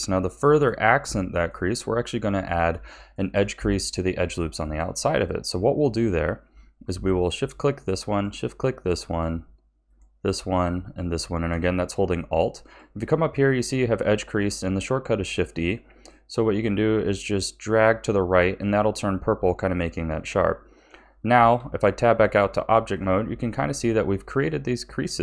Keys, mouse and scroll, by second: 0.5-7.3 shift+middle drag, 7.3 alt+shift+click, 8.1 alt+shift+click, 9.8 alt+shift+click, 10.8 alt+shift+click, 12.6-15.6 drag, 21.2 a, 21.5 Tab, 22.8-23.5 scroll down 3, 23.5-25.2 middle drag.